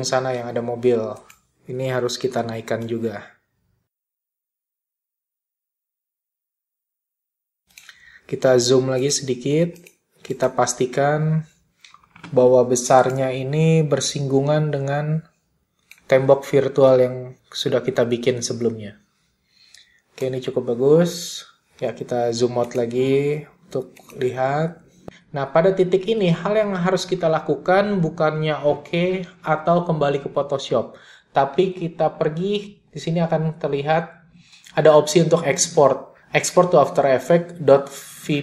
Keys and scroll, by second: 8.4 z.